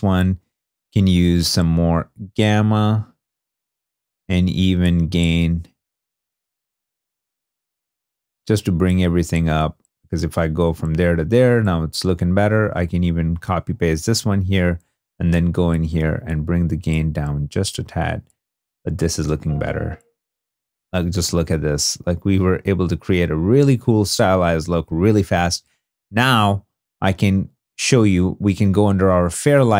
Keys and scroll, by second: 19.0 space, 20.4 shift+d, 23.1 shift+d.